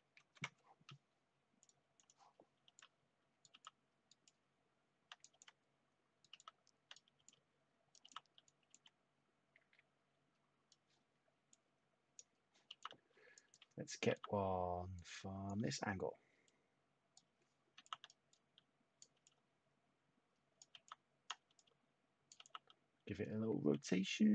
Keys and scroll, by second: 0.1 ctrl+z, 2.6 ctrl+z, 3.1-5.7 typing, 7.2-9.2 typing, 10.2-10.9 typing, 12.4-14.1 typing, 17.7 t, 19.1-22.3 typing, 24.1-24.3 typing.